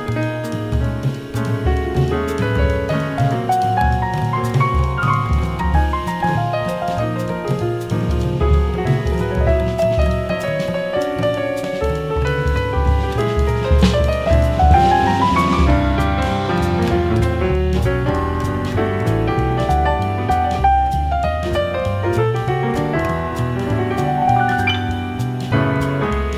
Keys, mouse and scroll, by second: 1.8 BackSpace, 1.9 BackSpace, 16.1-18.0 drag, 18.4-20.2 drag, 23.4-25.2 drag.